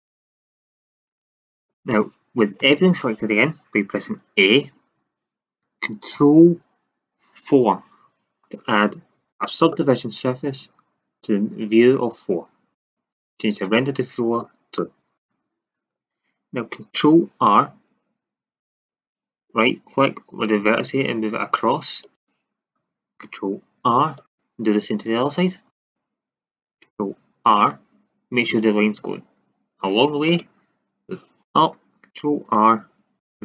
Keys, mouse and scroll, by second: 2.3 a, 2.5 a, 7.4 ctrl+4, 12.7-14.7 drag, 14.7-17.3 middle drag, 17.3 ctrl+r, 22.1-24.1 drag, 23.5 ctrl+r, 25.8-28.0 drag, 27.3 ctrl+r, 31.5-33.4 drag, 32.4 ctrl+r.